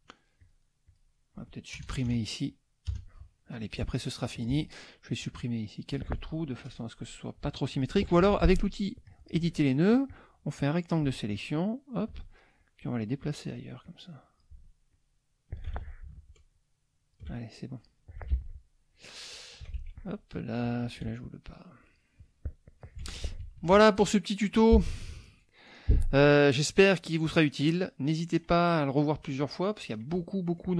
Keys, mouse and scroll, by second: 0.9 click, 1.7 KP_Add, 2.9 KP_Add, 3.4 middle click, 4.4 click, 5.2 click, 7.7 click, 9.0 click, 10.1 click, 11.4 shift+click, 12.5 shift+click, 13.8 click, 14.9 shift+click, 15.7 ctrl+shift+z, 16.5 shift+click, 17.6 shift+click, 18.3 ctrl+z, 18.9 ctrl+click, 19.8 ctrl+z, 20.8 shift+click, 21.8-23.0 drag, 23.0 F1, 23.4 KP_Subtract, 25.7 click, 26.7 click, 27.2 click, 29.0-30.2 drag.